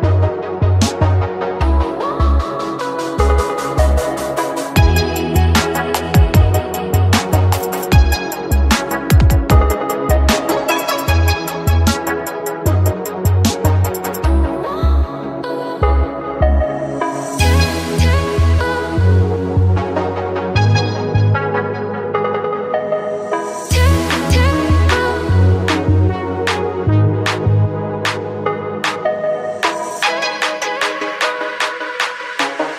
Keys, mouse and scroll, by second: 0.1-1.3 drag, 1.3 z, 2.2 click, 4.1 click, 5.4-6.9 middle drag, 6.9 Tab, 7.1 click, 7.6 click, 7.9 Tab, 8.5 middle click, 8.9 click, 10.1 shift+click, 11.2 s, 13.4-14.5 middle drag, 14.5 click, 15.0 middle click, 15.5 shift+click, 16.0 middle click, 16.7 click, 17.8 click, 19.1 click, 19.5 shift+click, 20.1 click, 21.2 click, 21.7 middle click, 22.1 shift+click, 22.7 middle click, 23.2 click, 24.0 click, 24.7-25.9 middle drag, 25.9 shift+click, 27.0 click, 28.8-30.4 middle drag, 30.4 click, 31.3-32.6 middle drag, 32.6-32.7 shift+drag.